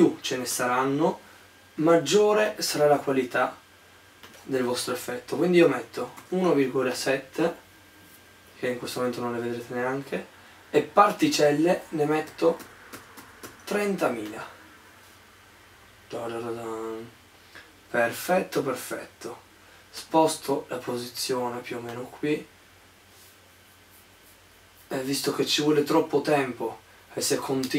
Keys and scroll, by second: 1.9 2, 2.3 2, 5.5-7.0 typing, 8.0-8.7 typing, 12.1-14.2 typing.